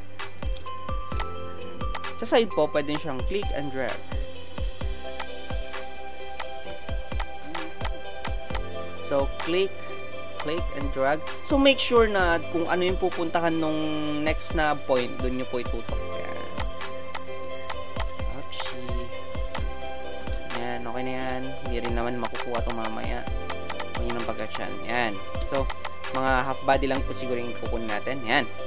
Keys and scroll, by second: 17.7 space, 19.6 alt+space, 20.3 ctrl+alt+space, 24.3 space.